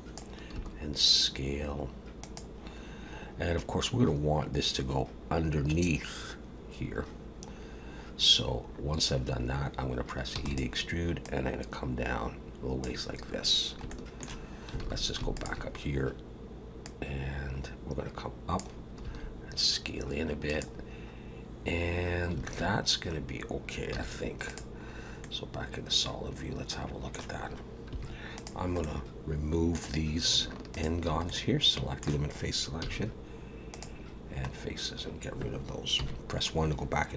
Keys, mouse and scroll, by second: 0.5 s, 5.2-6.1 scroll down 7, 7.0-7.7 scroll up 7, 8.6 scroll up 2, 10.3 e, 11.2 click, 13.4 scroll down 1, 13.9 shift+middle click, 14.8 alt+a, 15.3 alt+shift+click, 16.8 click, 19.0 s, 22.4 alt+a, 23.9 z, 24.8-25.2 scroll down 3, 25.2 middle click, 27.9 3, 28.3 click, 28.8 middle click, 30.7 shift+click, 31.3 middle click, 32.8 x, 34.5-35.9 scroll down 1, 36.1 KP_1.